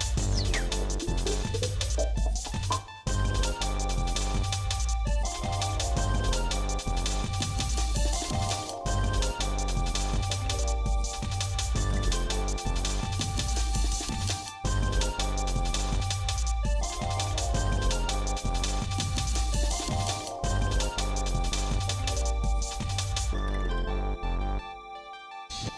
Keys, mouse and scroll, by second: 0.5 click, 1.4 click, 1.8-3.1 shift+middle drag, 3.2 middle click, 3.7 Tab, 7.7 l, 9.8 click, 11.1 l, 12.3 alt+n, 14.1 Tab, 14.6 middle click, 15.1 shift+middle click, 16.6-18.0 shift+middle drag, 18.2 middle click, 19.1 click, 19.9 click, 20.7 shift+middle click, 21.2 middle click, 21.6 middle click, 23.0 shift+click, 23.7 shift+middle click, 24.3 middle click.